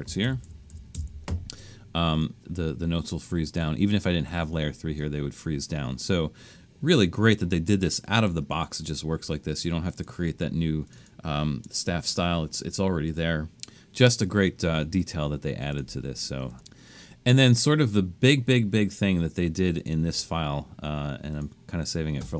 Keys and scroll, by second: 0.2-0.9 typing.